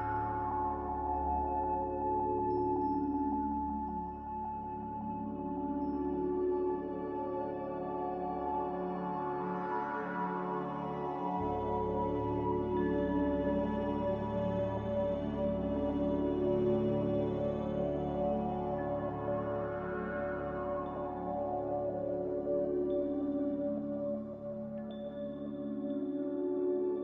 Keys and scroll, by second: 3.6 g, 6.4-7.4 typing, 9.8-10.6 typing, 20.3 z, 21.9 5, 22.0 Return, 25.2 ctrl+c.